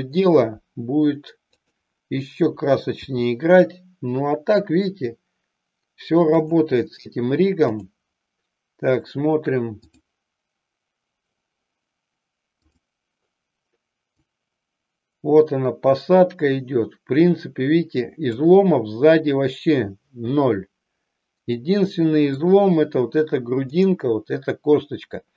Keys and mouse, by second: 1.5 click, 3.2 g, 12.7 click, 14.0-18.7 drag, 21.7 middle click, 23.7-25.3 drag.